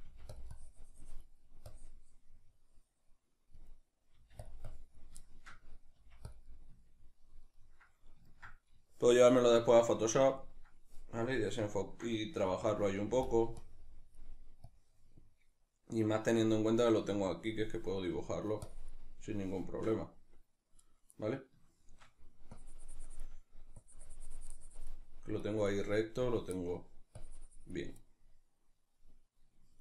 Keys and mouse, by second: 0.1 f, 0.4 click, 4.2 click, 4.2 f, 5.3-6.3 shift+middle drag, 6.0 f, 6.3 click, 6.5-12.8 middle drag, 12.5 f, 12.8 click, 13.0 f, 13.3 click, 18.1 middle click, 18.6-21.0 drag, 21.0-22.6 shift+middle drag, 22.6-29.0 drag, 29.0-29.8 middle drag.